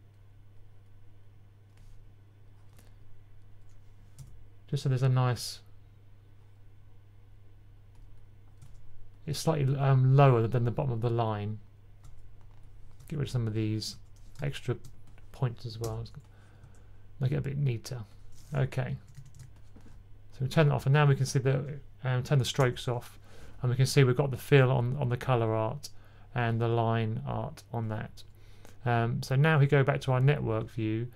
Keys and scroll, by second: 18.8-19.2 typing, 22.7 k.